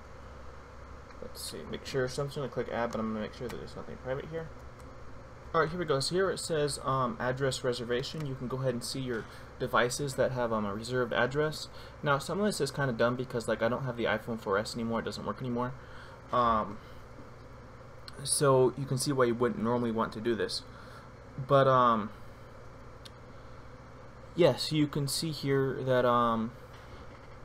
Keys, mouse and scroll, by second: 0.2-0.9 typing, 4.4 shift+F12, 4.5 Down, 4.5 click.